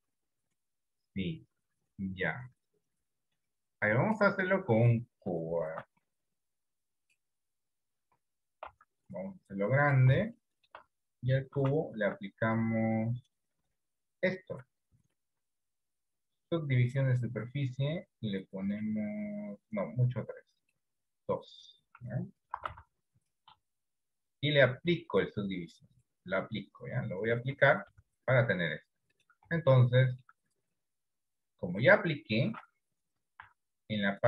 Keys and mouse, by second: 5.8 shift+a, 8.9 s, 10.7 shift+middle click, 11.9 ctrl+2, 20.8 click, 22.9 s, 25.4 click, 28.1 Tab, 30.1 shift+middle click, 33.6 z.